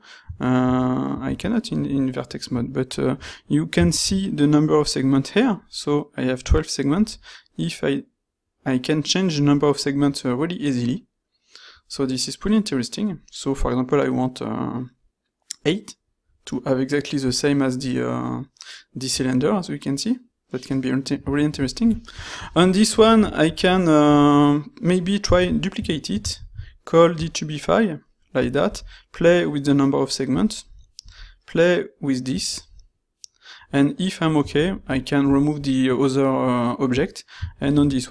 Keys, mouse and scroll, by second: 4.0 ctrl+shift+q, 25.5 shift+d, 26.4 ctrl+shift+q, 37.6 ctrl+shift+q.